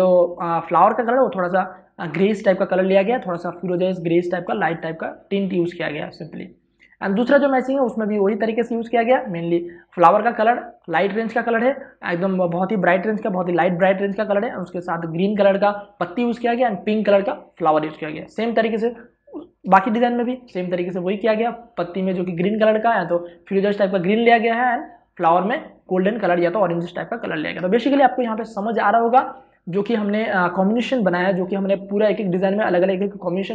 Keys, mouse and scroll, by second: 6.0 space, 6.1 ctrl+click, 9.3 ctrl+space, 9.6 ctrl+click, 9.8 ctrl+space, 10.5 ctrl+space, 19.7 click, 21.1 space, 21.3 ctrl+click, 29.0 space, 29.3 ctrl+click.